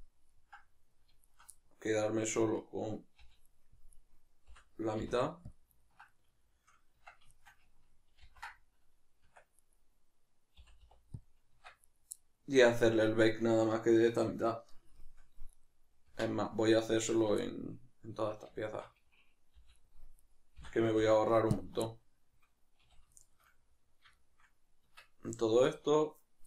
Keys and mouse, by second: 1.3 alt+shift+right click, 1.5-3.5 middle drag, 3.2 v, 3.9 right click, 4.5 l, 5.8-7.3 ctrl+middle drag, 7.0 Tab, 7.3 shift+right click, 8.2 ctrl+j, 9.6 right click, 11.9 right click, 12.1-15.5 middle drag, 15.5 right click, 16.1 Tab, 16.9 alt+right click, 17.5-18.7 middle drag, 18.7-19.6 alt+shift+right drag, 19.6 v, 20.5 l, 21.8-26.4 middle drag, 22.8 a, 24.8 Tab, 25.6 right click.